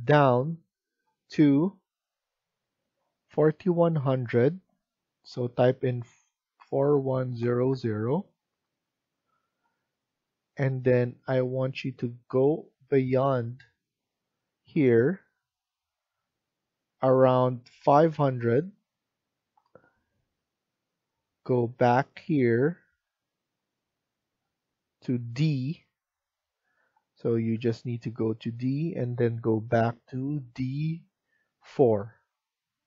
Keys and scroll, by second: 2.5 F1, 6.3-7.8 typing, 8.4 Return, 17.7 typing, 19.5 Return.